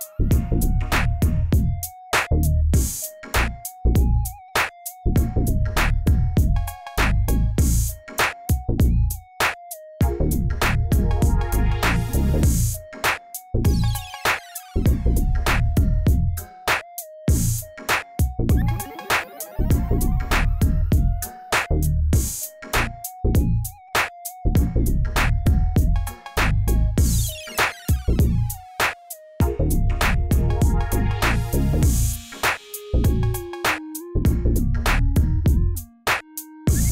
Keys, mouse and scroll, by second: 0.7-1.1 middle drag, 1.1 scroll down 1, 1.4 click, 1.6 scroll down 1, 2.1 shift+a, 4.5 s, 6.0 click, 6.4 click, 7.7 click, 8.0 click, 8.5-10.1 drag, 10.6 g, 13.0 click, 13.8 shift+drag, 14.3 ctrl+Left, 15.2 r, 17.5 click, 18.5 click, 18.9 click, 19.1 drag, 19.8 scroll down 1, 20.0-20.5 shift+middle drag, 20.5-20.9 scroll up 2, 20.9-21.6 shift+middle drag, 21.6 click, 23.7 click, 24.0 scroll up 4, 25.0 KP_1, 25.7 click, 26.5-26.9 drag, 27.8-28.3 drag, 28.3-29.1 shift+middle drag, 29.1 click, 29.7 click, 31.3-32.2 drag, 33.5-36.9 drag.